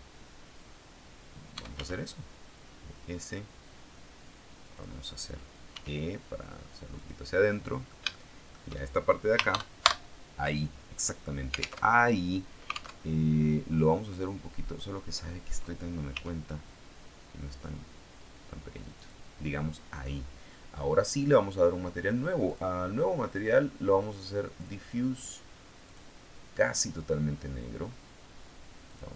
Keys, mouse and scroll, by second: 1.2-2.2 typing, 4.7 click, 5.6 e, 6.9 click, 7.3-8.6 middle drag, 9.4 ctrl+KP_Add, 11.8 alt+Tab, 12.9 alt+Tab, 16.0 s, 18.9 click, 22.3 click, 24.5 click, 25.7 click, 26.1 click, 28.7 click.